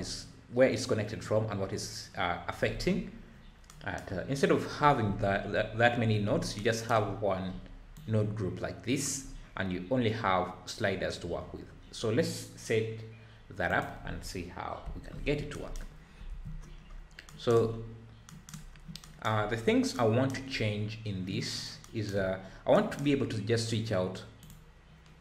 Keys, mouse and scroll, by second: 0.0-0.5 scroll up 5, 2.9-3.7 scroll down 8, 4.3-4.8 scroll up 1, 6.3 scroll up 5, 7.5-7.9 scroll up 2, 7.9 drag, 9.2 scroll up 6, 11.6-12.2 scroll down 6, 13.7 click, 14.8 Delete, 15.3 scroll down 6, 15.9 scroll up 1, 16.3 ctrl+s, 16.6-17.3 scroll down 9, 17.7-18.2 scroll up 3, 18.7 scroll down 4, 19.5-19.9 scroll up 2, 20.5-21.5 scroll up 5, 22.4-22.7 scroll up 4, 23.2-24.2 scroll up 5, 24.4-25.2 drag.